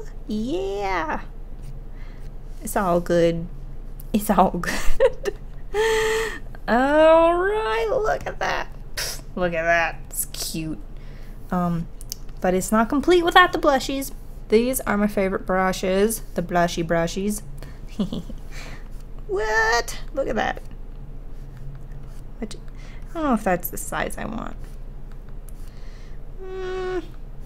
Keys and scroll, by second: 21.0 ctrl+z.